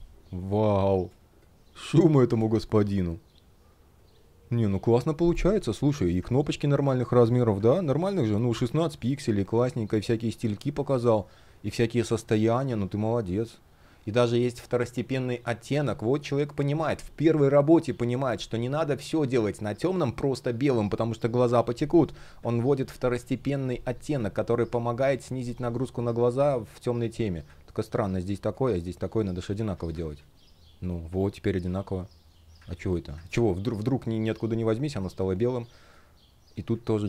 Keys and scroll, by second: 0.7 space, 7.2 super+\, 8.3 super+\, 10.6 space, 28.9 alt+super+c, 29.5 alt+super+v, 32.3 super+z, 32.9 super+z, 34.6 space.